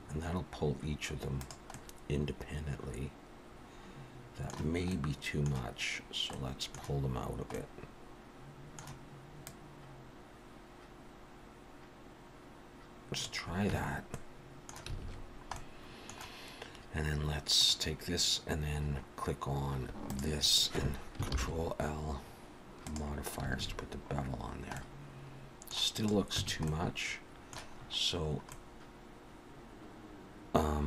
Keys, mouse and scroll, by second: 1.7 middle click, 4.9 middle click, 6.3 middle click, 7.5 middle click, 9.4 click, 13.7 Tab, 14.1 middle click, 15.0 alt+a, 15.2-15.9 scroll down 3, 15.5 middle click, 17.6 click, 18.9-19.6 scroll up 3, 20.1 shift+click, 21.3 ctrl+l, 23.5 alt+a, 23.9-24.8 scroll down 4, 24.8 middle click, 25.9 click, 26.4 Tab, 26.7 middle click, 27.7-28.3 scroll up 5, 28.5 middle click.